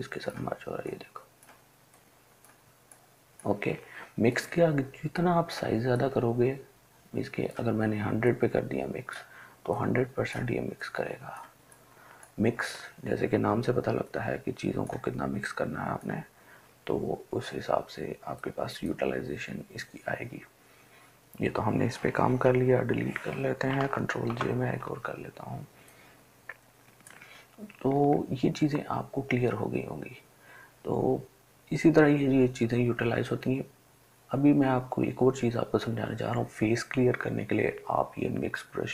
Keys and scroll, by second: 22.9 Delete, 24.2 ctrl+j.